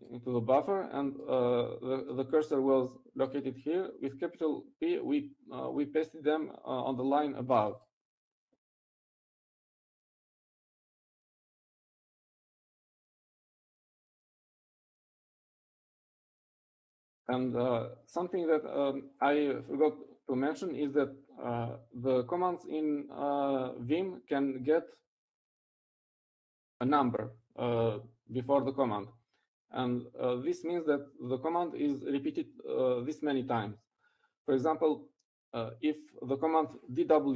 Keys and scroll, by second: 12.1 u, 20.7 Up, 21.9 Left.